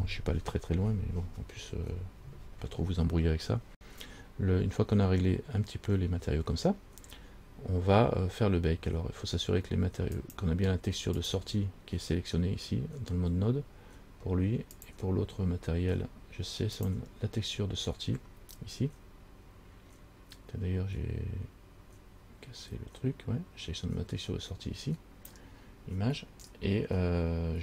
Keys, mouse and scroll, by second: 10.3 click, 11.4 click, 15.0 click, 16.9 click.